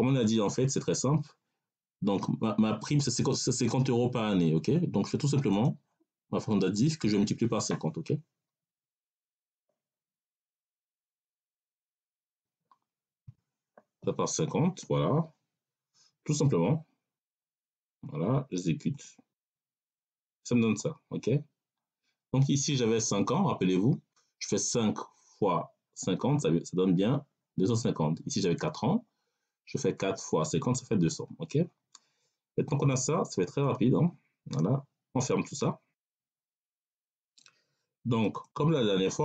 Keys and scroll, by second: 8.7 \, 12.2 5, 13.1 0.